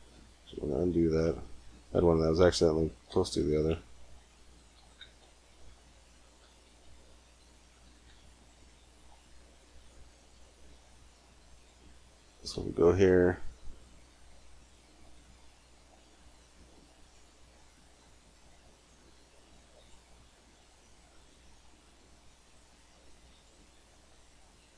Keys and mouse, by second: 0.1 ctrl+z, 0.6 ctrl+z, 3.0 e, 4.6 e, 6.2 e, 7.7 e, 8.9-11.0 drag, 11.3-13.2 drag, 12.4 g, 16.0-18.6 drag, 18.8 middle click, 19.6 click, 21.3 g, 21.5-22.9 drag, 23.2 click, 23.4 g.